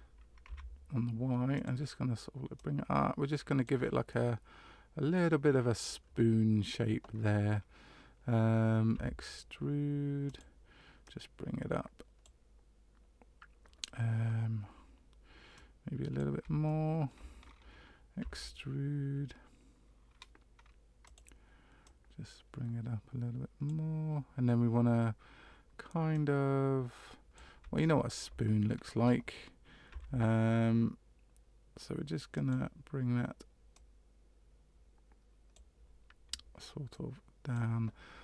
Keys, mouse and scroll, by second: 2.5 click, 4.1 middle click, 8.9 e, 11.0 click, 15.5 click, 16.6 shift+middle click, 18.2 e, 21.8 click, 26.1 click, 27.7 shift+middle click, 29.9 e, 33.7 click, 36.9 click.